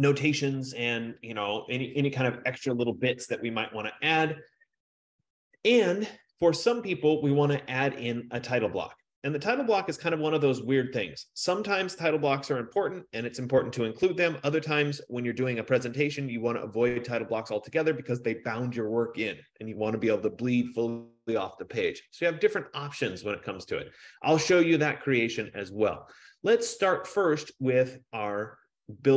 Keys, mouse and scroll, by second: 11.7 F15.